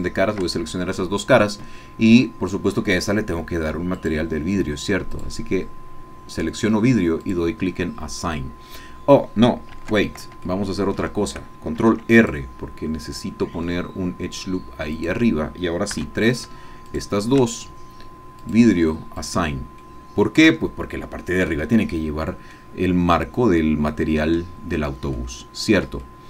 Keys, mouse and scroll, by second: 4.0 click, 5.1 click, 7.2-9.5 drag, 9.8 ctrl+z, 10.5 shift+click, 11.8 ctrl+r, 12.1 ctrl+click, 15.0 click, 15.9 3, 16.3 shift+click, 16.9 shift+click, 18.4 click, 19.2 click, 19.9 middle click, 20.6 Tab, 20.8-22.3 scroll down 1, 22.3 scroll down 1, 22.5-24.6 drag, 24.8-25.1 scroll down 1, 25.1-26.2 drag.